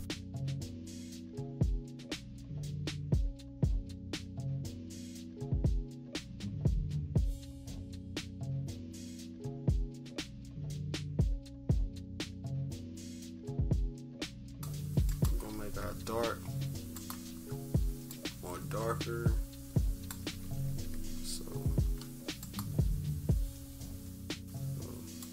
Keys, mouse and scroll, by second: 0.0 scroll up 1, 0.0 =, 0.6 click, 1.0 click, 1.6 click, 2.3 click, 2.4 click, 2.7 click, 2.8 click, 3.2 click, 4.1 click, 5.0 click, 5.6 -, 5.9 =, 7.1 click, 7.4 click, 7.9 click, 8.2 click, 8.5 click, 9.7-10.7 typing, 10.3 scroll down 1, 10.9-11.5 scroll up 1, 12.5 =, 12.8 -, 13.4 =, 14.2 click, 14.4-15.5 drag, 15.5 -, 16.9 click, 18.0-20.1 drag, 20.4 =, 20.6 =, 21.0-22.3 scroll down 2, 22.3-25.3 drag.